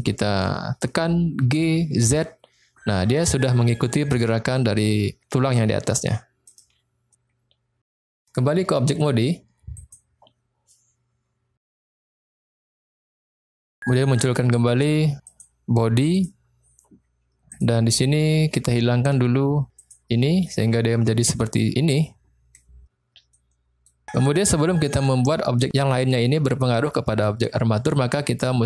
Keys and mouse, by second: 1.4 g, 2.0 z, 6.5 click, 9.0-10.0 drag, 15.3 click, 16.1 click, 17.5 click, 19.8 click, 20.5-22.5 middle drag, 23.4-23.9 middle drag.